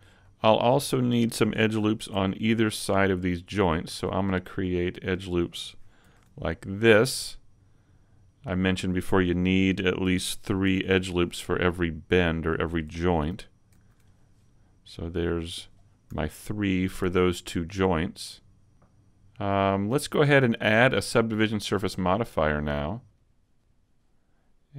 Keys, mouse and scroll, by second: 0.2 middle click, 0.8-2.4 scroll up 1, 2.4 ctrl+r, 2.4-3.4 scroll up 1, 4.1 click, 4.3 middle click, 6.0 ctrl+r, 8.6 click, 9.4 shift+middle click, 10.6 ctrl+r, 12.4 click, 13.7 ctrl+r, 15.7 click, 16.1 a, 16.4 middle click, 17.6 middle click, 19.6 scroll down 1, 21.6 click.